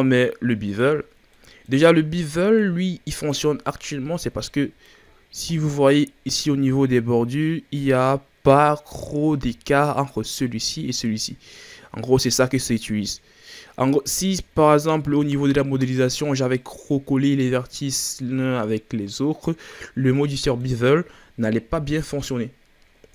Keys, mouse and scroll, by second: 0.2-1.0 middle drag, 1.0 scroll up 1, 1.3-2.0 middle drag, 2.0 scroll down 3, 2.2-2.7 middle drag, 2.7-3.7 scroll up 7, 3.8 Tab, 4.2-5.1 middle drag, 5.1-5.4 shift+scroll down 5, 5.4 middle click, 5.9 scroll up 4, 12.2-12.5 scroll down 2, 12.5-13.9 middle drag, 13.9-14.3 scroll up 3, 14.7-15.6 scroll down 2, 16.5-19.5 middle drag, 19.6-20.0 scroll down 4, 20.0-23.1 middle drag.